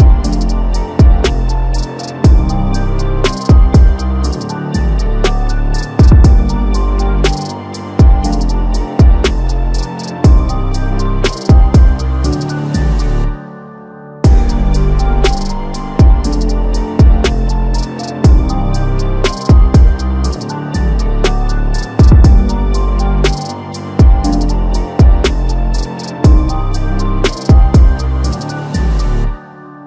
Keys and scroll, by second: 0.3 ctrl+shift+z, 0.5 ctrl+shift+z, 1.6 ctrl+t, 10.1 ctrl+t, 14.7 ctrl+alt+t.